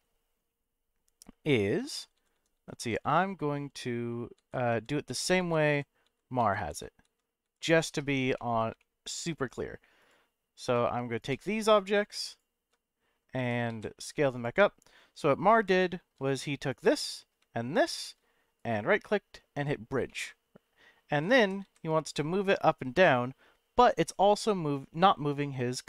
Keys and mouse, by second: 1.5 click, 1.9-8.0 ctrl+z, 8.3 middle click, 8.8 middle click, 10.0 click, 11.3 shift+click, 12.2 shift+click, 13.3 e, 13.7 z, 14.3 click, 15.8 shift+middle click, 16.7 click, 17.0 middle click, 17.9 shift+click, 18.7-19.6 right drag, 20.0 middle click, 21.4 g, 21.6 z.